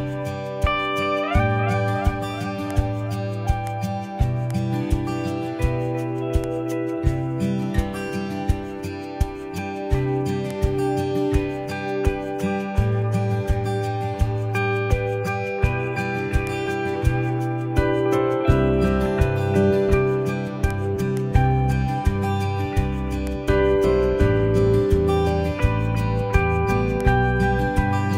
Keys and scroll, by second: 17.7 super+0.